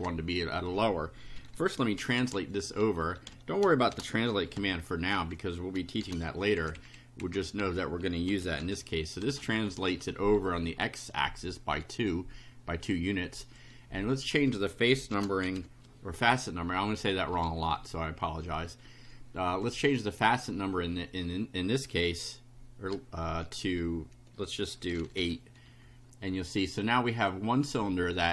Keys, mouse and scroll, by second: 1.1-4.5 typing, 6.0 shift+0, 6.3 shift+space, 6.5 shift+Left, 7.5-10.0 typing, 10.7 End, 13.4 click, 14.9-16.1 typing, 17.3 =, 25.1 8, 25.6 F5, 26.8 click.